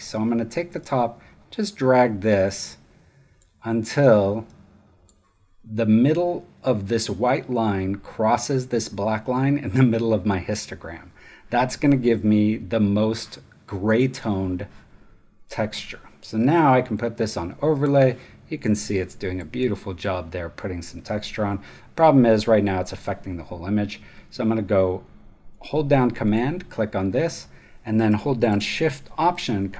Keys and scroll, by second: 18.5 space.